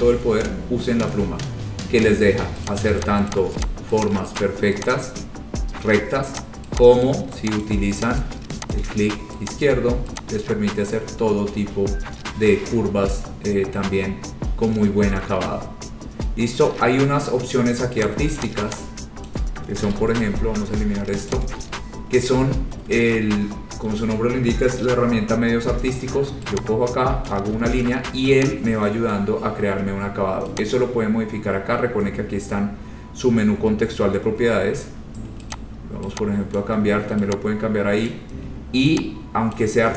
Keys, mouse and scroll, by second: 1.2 click, 1.8-2.6 scroll, 2.9 click, 3.2 click, 3.5 click, 3.8 click, 4.2 click, 4.6 click, 5.0 click, 6.5 click, 7.2 click, 7.8 click, 8.4 click, 8.9 click, 9.8 click, 10.3 click, 11.1-12.4 scroll, 13.2-14.1 scroll, 14.6-15.3 scroll, 16.9-17.4 scroll, 18.2 click, 18.6 click, 19.4 click, 20.0 Insert, 20.0 Delete, 21.5 click, 27.5 click, 29.3 click, 30.8 click, 34.4-35.4 scroll, 35.7 click, 36.8 click, 38.2 click, 39.7 click.